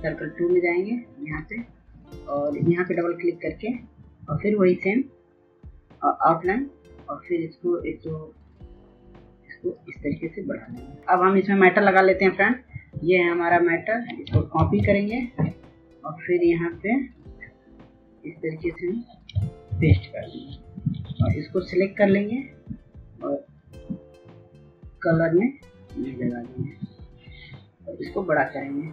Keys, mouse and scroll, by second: 13.6 ctrl+c, 14.1 click, 18.7 ctrl+v, 20.0 ctrl+a, 22.5 click, 27.1 click.